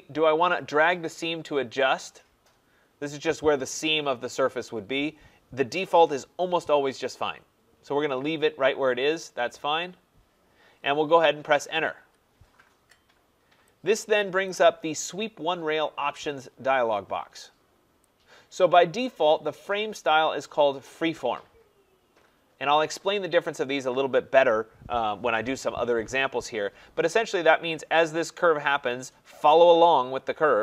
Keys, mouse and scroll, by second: 11.9 Return, 14.5 click, 18.0 click.